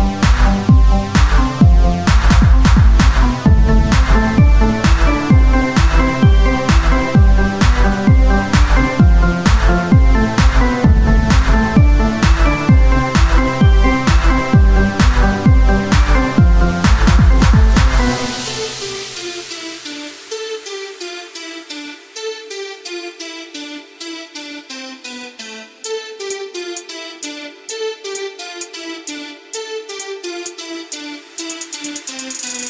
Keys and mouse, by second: 2.9 Tab, 2.9 KP_3, 3.6-5.1 drag, 5.1 r, 7.2 click, 7.4 KP_1, 10.0-11.6 typing, 13.6-15.4 drag, 13.6 z, 15.4 shift+d, 17.6-21.4 drag, 19.3 s, 21.4 KP_3, 22.7 r, 23.7 s, 27.1-28.8 drag, 28.9 s, 30.7 KP_1, 31.2 z.